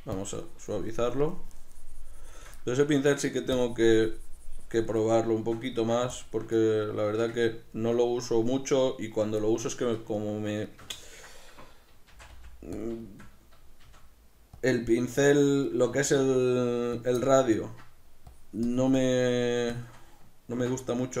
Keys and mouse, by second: 0.3-2.7 shift+drag, 2.7-3.7 middle drag, 3.7-5.1 shift+drag, 5.1-6.2 middle drag, 6.2 shift+click, 6.7-12.9 middle drag, 12.2 shift+c, 12.9 click, 13.1-14.7 shift+middle drag, 14.0 shift+f, 14.7 click, 15.1 f, 15.9 right click, 16.1 shift+f, 17.1 click, 17.3-18.4 middle drag, 18.4-21.2 drag.